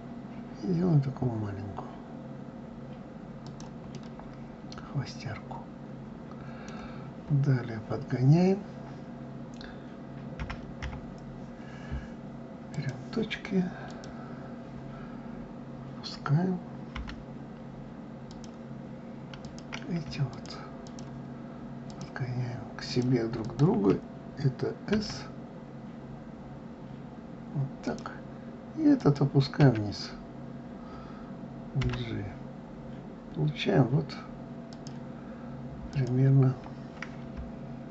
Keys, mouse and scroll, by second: 3.5-6.5 middle drag, 6.7-7.8 scroll up 3, 7.8-10.0 scroll up 1, 10.0 KP_1, 10.4 KP_9, 12.3 click, 13.5 click, 19.0 click, 19.9 shift+click, 20.4 shift+click, 21.5 shift+click, 22.5 shift+click, 23.0 shift+click, 24.5 s, 28.6 click, 29.2 s, 35.5 click.